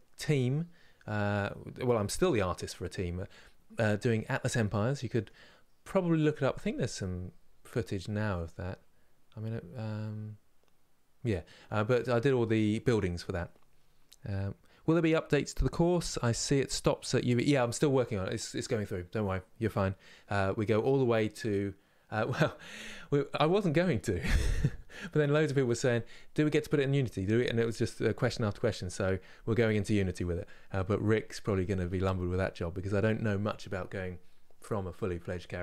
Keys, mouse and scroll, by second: 4.4-35.6 middle drag.